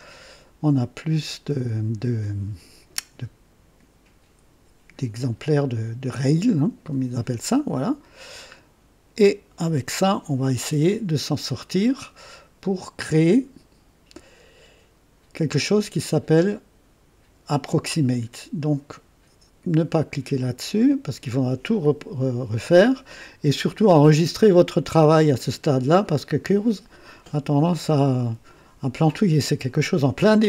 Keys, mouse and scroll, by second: 6.1 click, 7.7-9.6 drag.